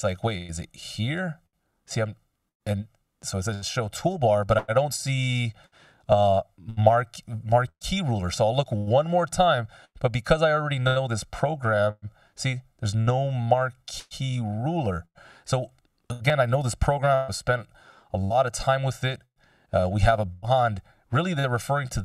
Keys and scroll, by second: 17.5 ctrl+alt+super+m.